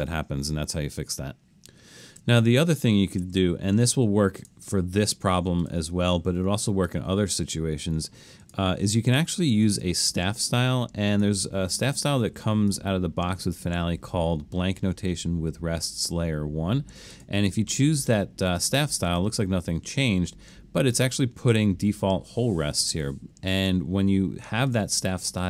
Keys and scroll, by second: 2.2 super+z, 3.2 super+z.